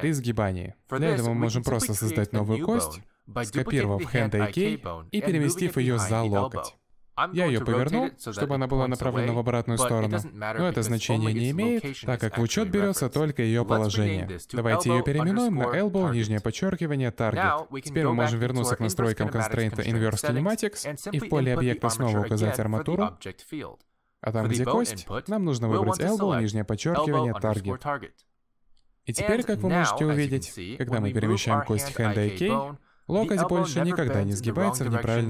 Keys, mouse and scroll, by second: 0.6-1.0 scroll down 3, 0.7 middle click, 1.3-1.6 scroll up 3, 1.4 middle click, 1.9 alt+g, 2.2 middle click, 3.0 Tab, 3.1 middle click, 4.5 shift+d, 6.3 shift+middle click, 7.2 r, 9.1 middle click, 9.5 g, 10.8 middle click, 11.2 g, 11.8 middle click, 12.1 middle click, 12.5 middle click, 12.8 scroll down 1, 12.9 middle click, 13.8 click, 14.3 click, 17.1 middle click, 18.3 click, 18.9 middle click, 19.5 Tab, 20.1 middle click, 21.4 click, 22.9 click, 29.6 middle click, 30.6 click, 31.1 middle click, 31.9 g, 35.1 middle click.